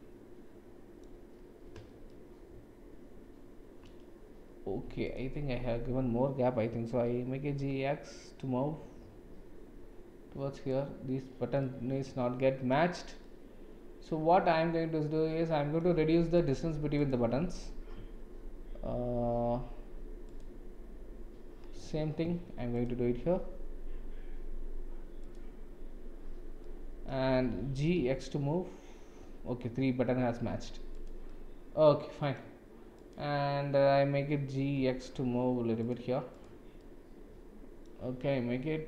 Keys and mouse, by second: 2.0-3.8 shift+middle drag, 5.0 shift+click, 6.9 g, 11.6-12.7 middle drag, 13.2-15.8 middle drag, 16.4 click, 20.4 click, 22.8 click, 25.2 click, 26.6-27.1 middle drag, 27.8 g, 31.2-32.4 middle drag, 32.9 click, 34.5 g, 36.8-37.9 middle drag.